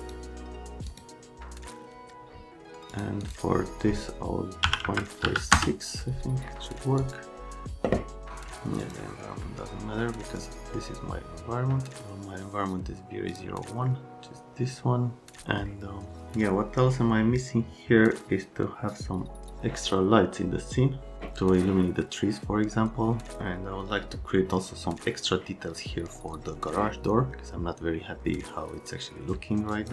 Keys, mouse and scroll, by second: 0.0 click, 0.9 click, 2.9 click, 3.2 click, 4.6 KP_5, 4.8 KP_Decimal, 5.2 KP_6, 5.5 KP_Enter, 7.0 click, 8.8 click, 10.4 click, 13.3 click, 14.0 click, 29.7 click.